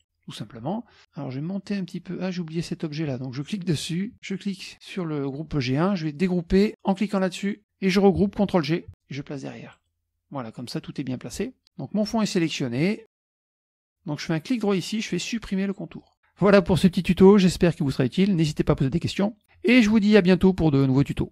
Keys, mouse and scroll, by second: 3.5 click, 4.2 shift+click, 7.2 click, 9.8 click, 14.6 right click, 16.0 click.